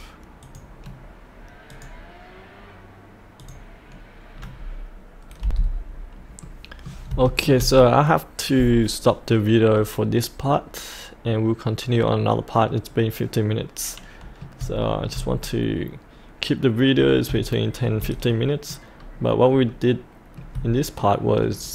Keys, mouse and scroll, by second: 0.4-1.4 drag, 3.5 click, 4.4-5.4 scroll down 1, 5.4 F8, 5.9-6.4 scroll up 1, 6.4 middle click, 7.2 shift+middle click, 7.9-14.6 shift+middle drag, 14.8 shift+middle click, 15.4-17.0 middle drag, 17.5 shift+middle click, 18.4 middle click, 18.9-19.7 scroll down 1, 19.7 middle click, 20.9 shift+middle click.